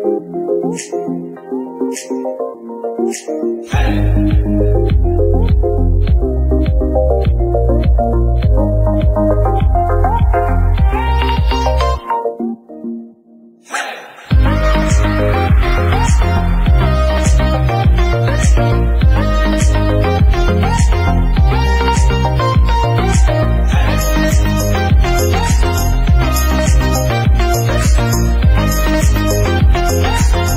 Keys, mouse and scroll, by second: 4.1 click, 4.5-5.6 shift+middle drag, 5.6 ctrl+Tab, 6.2 click, 6.9 alt+a, 7.1-7.6 shift+middle drag, 7.6 click, 8.0 shift+click, 9.0 alt+a, 9.2 click, 9.6 shift+click, 10.1 ctrl+l, 10.7 alt+a, 10.9-11.3 shift+middle drag, 11.3-11.9 scroll up 5, 11.4 middle drag, 12.3 click, 12.6-13.3 right drag, 13.3 Tab, 13.5 shift+middle click, 13.7 scroll up 2, 14.1 alt+a, 14.3 ctrl+right click, 15.3 shift+middle click, 15.5 scroll up 1, 15.8 shift+middle click, 16.4-18.4 typing, 19.1 KP_Add, 19.9 middle click, 20.3 scroll down 2, 20.4 shift+middle click, 20.6 right click, 21.1 middle click, 21.7 click, 22.6 Tab, 22.7-23.1 scroll down 3, 23.1 KP_1, 23.2 alt+a, 23.3 scroll down 1, 23.6 scroll up 3, 23.8 click, 24.6 click, 25.2 alt+a, 25.4 shift+middle drag, 25.6 scroll down 2, 25.8-27.0 shift+middle drag, 27.5-29.3 shift+middle drag, 29.3-30.0 scroll up 5, 29.5 KP_1, 30.0 shift+middle drag, 30.1 scroll down 1.